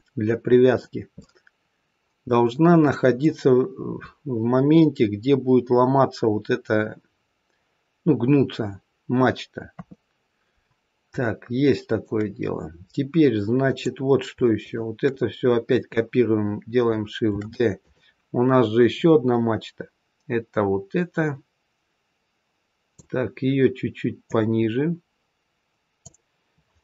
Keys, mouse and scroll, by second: 1.1 middle click, 3.9-5.6 scroll down 2, 9.6 KP_3, 10.5-11.2 scroll down 2, 11.2 shift+middle click, 13.6 click, 14.5 shift+click, 17.2 shift+d, 18.9 click, 24.1 click.